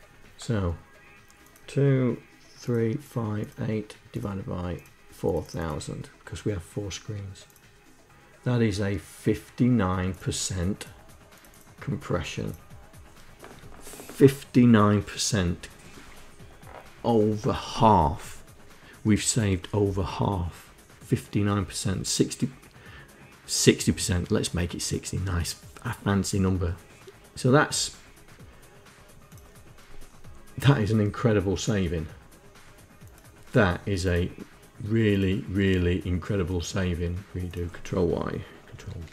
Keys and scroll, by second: 38.6 ctrl+y.